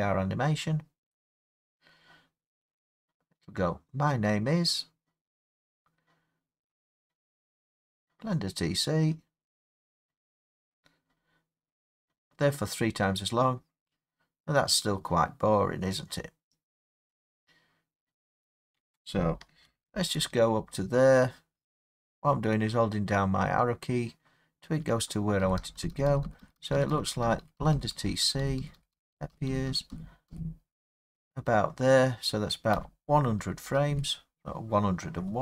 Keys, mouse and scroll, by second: 18.8 space, 19.9-24.9 Left, 25.4 Right, 25.6 Right, 25.8 Right, 25.9 Right, 26.1 Right, 26.3 Right, 26.4 Right, 26.6 Right, 26.8 Right, 26.9 Right, 27.1 Right, 27.3 Right, 27.4 Right, 27.6 Right, 27.8 Right, 27.9 Right, 28.1 Right, 28.2 Right, 28.4 Right, 28.6 Right, 28.8 Right, 28.9 Right, 29.1 Right, 29.3 Right, 29.5 Right, 29.7 Right, 29.9 Right, 30.3 Right, 32.8 Left, 33.9 Right.